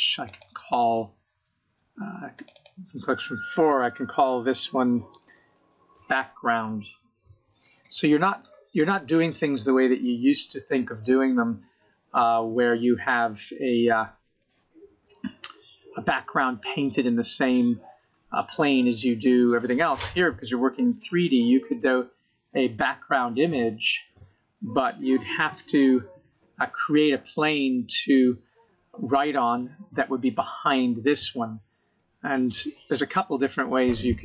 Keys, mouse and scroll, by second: 0.8-1.9 scroll down 3, 1.9 click, 2.1 click, 12.6 middle click, 14.1-15.4 scroll up 11, 15.4-16.0 scroll down 5, 16.0 middle click, 17.3 scroll up 3, 17.7-18.2 scroll down 6, 18.2 middle click, 24.3 middle click, 30.7 middle click, 32.7-33.0 scroll down 1, 33.0-34.2 scroll up 24.